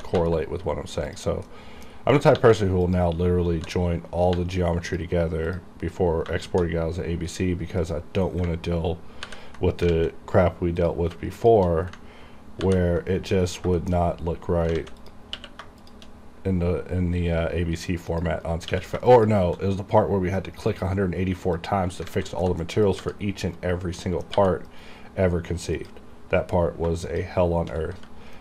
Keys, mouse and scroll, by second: 0.7-1.2 scroll up 1, 1.2 click, 1.6 middle click, 2.2-3.7 typing, 2.9 click, 5.0 click, 6.6 shift+4, 8.0 shift+click, 9.4 ctrl+j, 10.0 alt+a, 10.9 click, 11.5 shift+click, 12.7 ctrl+j, 13.5 scroll up 1, 13.9 shift+middle click, 14.0 shift+scroll up 1, 14.8 scroll down 1, 14.9 alt+a, 15.1 click, 15.5 q, 15.9 shift+click, 16.3-17.1 scroll down 2, 17.1-18.2 scroll down 1, 18.2 click, 18.5 scroll down 1, 18.7 q, 19.2 click, 19.8 scroll up 1, 20.5-21.0 scroll down 1, 21.7 click, 22.0 scroll down 1, 22.2 alt+a, 22.6 middle click, 23.0 click, 23.1 g, 23.7 right click, 24.2 middle click, 24.5 g, 24.8 right click, 25.9 click, 27.1 shift+click, 28.1 g.